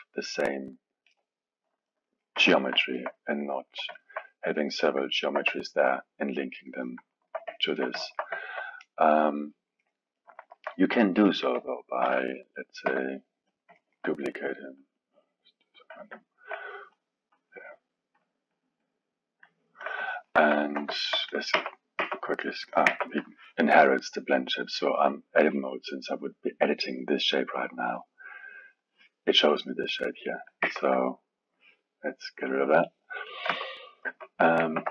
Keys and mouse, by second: 0.5-2.3 middle drag, 2.3 KP_1, 2.8-11.2 alt+middle drag, 11.2 click, 12.0 shift+d, 13.7-14.8 alt+middle drag, 14.8-20.1 drag, 20.1-21.3 alt+middle drag, 21.3 click, 21.5 Tab, 22.0 Tab, 22.9 Tab, 30.6 Tab, 32.5 click, 33.5 Tab, 34.1 Tab, 34.6 ctrl+Tab.